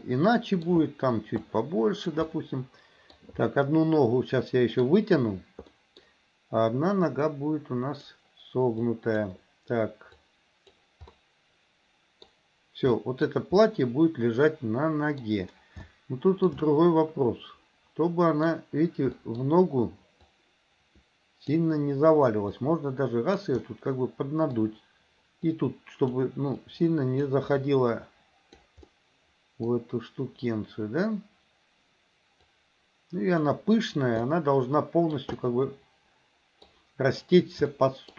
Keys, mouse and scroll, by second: 0.0 middle click, 1.5 click, 2.3 middle click, 3.5-5.0 middle drag, 5.8 middle click, 7.1-8.2 drag, 8.8 click, 10.2 click, 11.2-12.3 middle drag, 13.0 middle click, 13.7-15.3 middle drag, 15.8 shift+middle click, 16.7-18.5 middle drag, 19.2 middle click, 20.3-21.6 drag, 22.6 click, 23.7 middle click, 25.6 click, 26.7 click, 27.7-28.7 drag, 29.0 middle click, 32.5 click, 34.2 middle click, 35.3-36.7 middle drag, 37.7 shift+middle click.